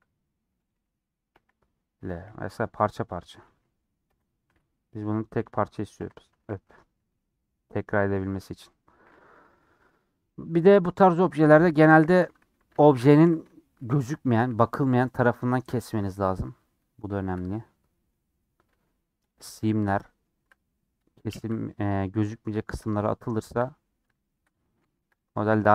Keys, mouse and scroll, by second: 8.7 middle click, 9.2 Tab, 9.3 middle click, 10.0 Tab, 10.2 middle click, 10.7 2, 12.5 ctrl+z, 13.0 alt+shift+click, 13.4 shift+middle click, 14.3 alt+shift+click, 14.6 middle click, 15.5 scroll down 2, 15.6 middle click, 16.0-16.7 scroll up 3, 16.7 middle click, 17.3-17.6 scroll up 3, 17.6-18.3 scroll down 2, 17.8 middle click, 18.3-19.3 scroll up 1, 19.3 alt+click, 19.6-21.0 shift+middle drag, 21.0 scroll up 2, 21.1-22.7 shift+middle drag, 22.7 alt+shift+click, 23.6 scroll down 3, 24.1-25.1 shift+middle drag, 25.1-25.6 scroll up 2, 25.2 middle click.